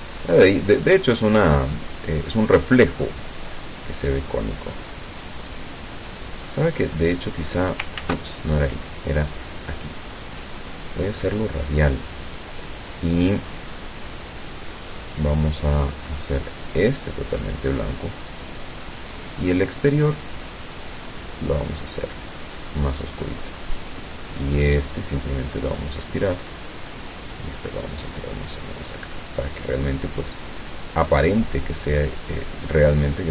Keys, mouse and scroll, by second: 6.7 click, 8.1 ctrl+z, 9.5 click, 11.0 click, 15.0 click, 16.8 click, 18.7 click, 20.6-23.2 drag, 24.2-26.0 drag, 26.8-29.0 drag, 30.0-31.4 drag, 32.0-33.3 drag.